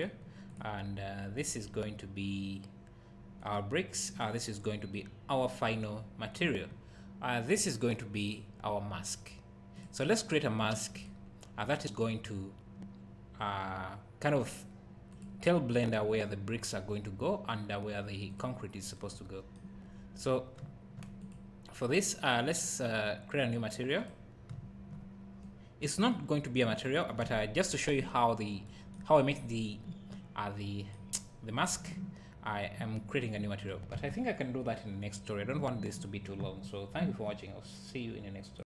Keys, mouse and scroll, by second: 0.0 click, 9.8-11.0 drag, 19.9-20.6 scroll up 1, 20.6 `, 21.3 click, 24.1 click, 25.4 click, 28.2-28.7 scroll up 1.